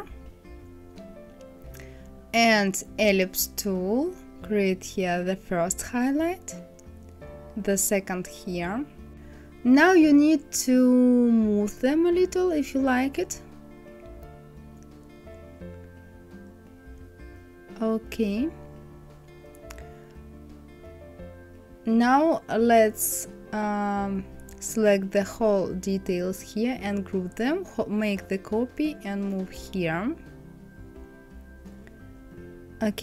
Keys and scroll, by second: 14.6 Down.